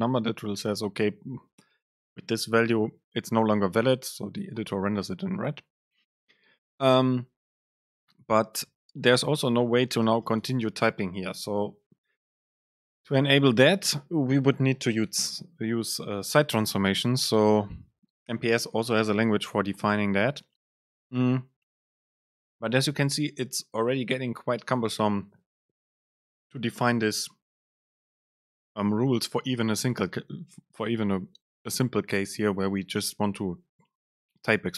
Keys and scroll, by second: 11.1 BackSpace.